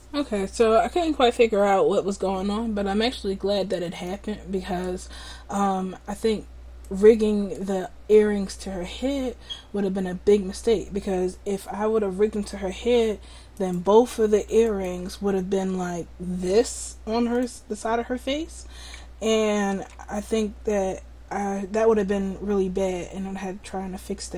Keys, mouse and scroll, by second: 4.3 middle click, 13.6-15.7 drag, 15.7 r, 19.9 ctrl+z.